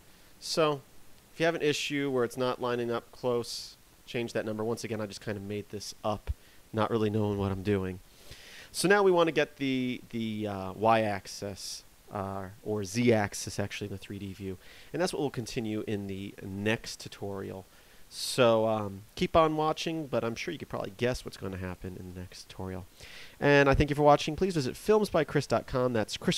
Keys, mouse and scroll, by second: 1.9 click, 2.6 click.